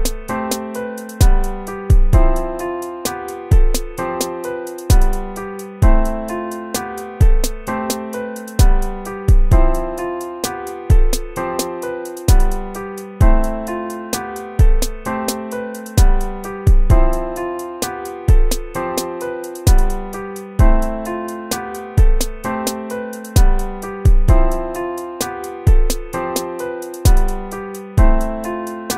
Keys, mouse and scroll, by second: 0.0-5.2 typing, 4.3 ctrl+z, 6.0 ctrl+-, 6.6 ctrl++, 7.4 right click, 10.9 right click, 13.6 ctrl++, 13.9-16.6 typing, 17.5 ctrl+-, 18.3 BackSpace, 18.9 BackSpace, 21.0 BackSpace, 22.4-24.5 typing, 24.7 ctrl+z, 25.8 ctrl+-, 27.8 ctrl++, 28.5 right click, 28.8 ctrl++.